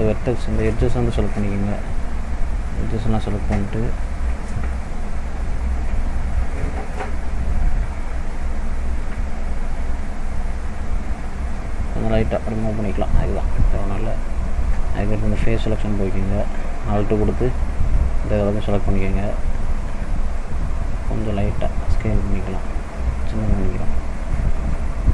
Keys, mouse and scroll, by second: 0.7 click, 0.9-1.6 scroll up 1, 2.7 click, 2.7 scroll up 1, 3.9 alt+click, 7.5 click, 10.4 click, 12.5 scroll down 2, 13.0 middle click, 13.6 scroll up 1, 15.6 scroll up 2, 15.7 click, 17.2 alt+click, 18.8 alt+shift+click, 21.4 s, 24.9 middle click.